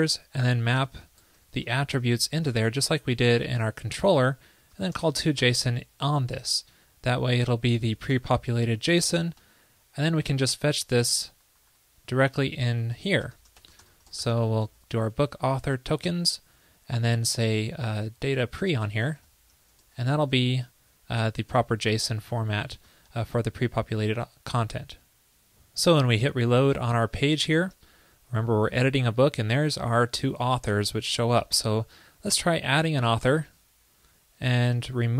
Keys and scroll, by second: 8.2 Escape, 9.4 super+s, 16.0 super+Right, 21.6 Escape, 22.8 super+s, 27.7 super+r.